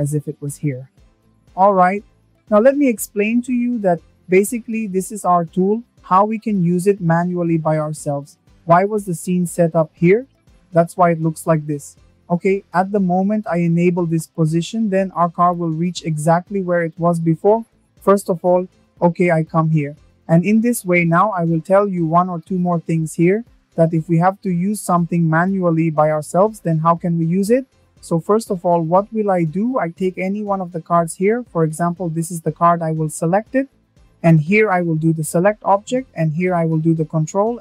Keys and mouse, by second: 1.5 shift+drag, 10.2 click, 10.7 shift+middle click, 14.1 shift+middle drag, 17.1 KP_0, 18.8 middle click, 28.4 right click, 30.1 right click, 30.6-33.4 middle drag, 34.2 ctrl+c, 34.6 ctrl+c, 35.7-37.6 drag.